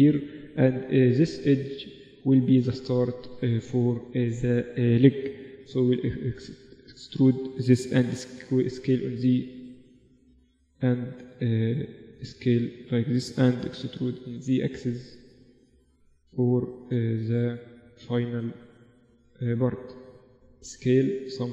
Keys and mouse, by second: 2.1 click, 2.6-5.6 middle drag, 5.6 e, 7.8 s, 10.0 s, 13.1 middle click, 13.9 e, 16.4-18.3 drag, 18.1-20.5 middle drag, 19.0-20.9 drag, 20.5 s.